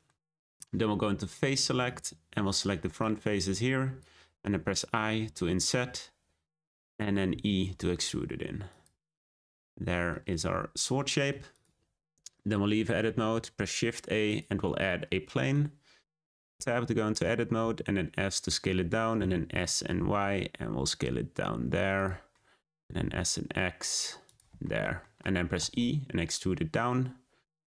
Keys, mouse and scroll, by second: 0.0-1.8 middle drag, 1.8-3.0 drag, 7.0 middle click, 7.3 e, 9.1 scroll down 1, 9.3-11.5 middle drag, 11.5 click, 11.8 Tab, 12.3-13.3 shift+middle drag, 13.3 shift+a, 14.8-16.3 middle drag, 16.3 Tab, 16.8-17.6 scroll up 3, 17.6 s, 19.1 s, 22.3 middle click, 22.8 s, 24.6 shift+middle click, 25.5 e.